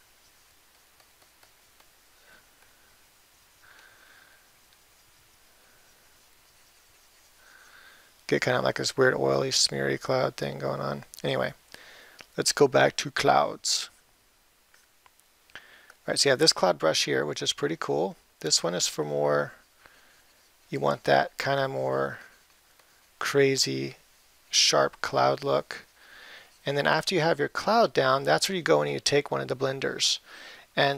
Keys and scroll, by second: 18.2 [.